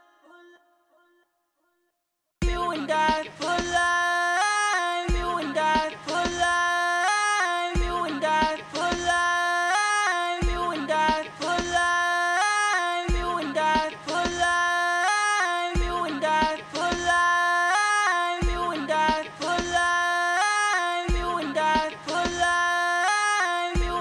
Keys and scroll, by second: 8.8-10.1 typing, 11.3-13.2 typing, 20.7 ctrl+super+w, 21.4 ctrl+super+w.